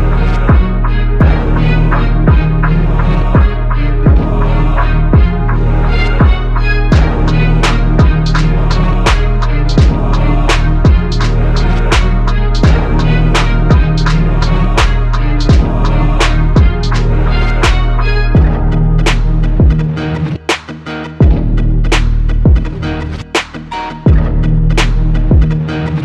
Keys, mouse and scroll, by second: 0.3 e, 2.7 x, 4.3 x, 7.7-9.3 typing, 15.0 a, 23.8 KP_7, 24.8 shift+a.